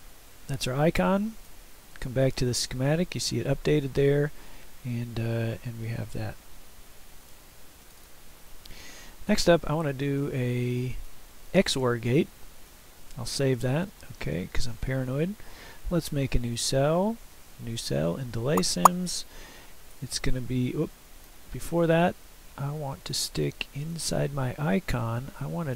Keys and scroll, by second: 12.6 ctrl+s, 20.0 Return.